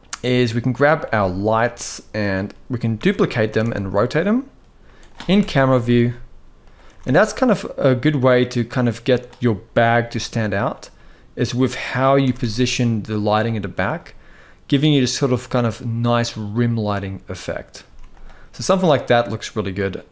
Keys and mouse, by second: 0.3 click, 0.7 middle click, 1.4-2.0 drag, 2.6 shift+d, 5.0 KP_0, 5.6 r, 6.5 r, 10.1 g, 11.1 click, 11.9 r, 17.5 z, 19.5-20.1 drag.